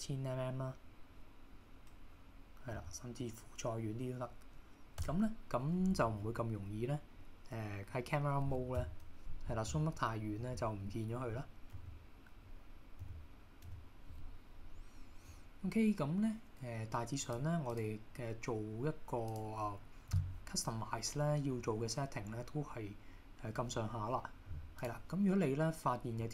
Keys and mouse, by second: 8.8 KP_0, 13.0 KP_0, 13.7 KP_0, 17.4 click, 19.4 click, 24.9 click.